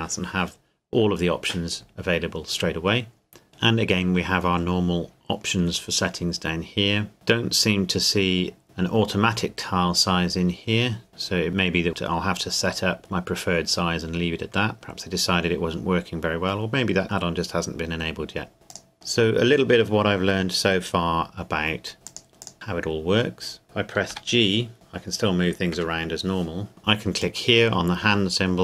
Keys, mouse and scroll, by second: 6.4-7.1 scroll down 1, 7.1 scroll up 1, 7.4-9.9 scroll down 1, 18.9-19.4 scroll up 1, 22.1 click, 24.1 g, 25.7 Escape, 27.2 click.